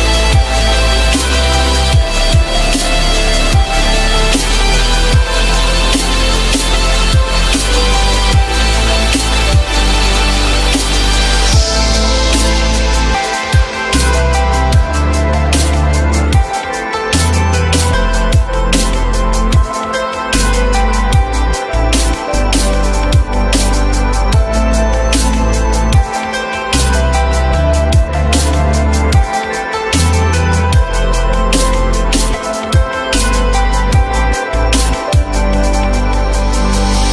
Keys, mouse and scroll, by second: 6.1 alt+middle click, 7.6 alt+middle click, 8.6 alt+middle click, 10.6 z, 13.2-14.4 typing, 17.0 alt+middle click, 20.9 alt+middle click, 21.8 t, 22.9 t, 25.0 z, 25.9 F3, 29.5 ctrl+z.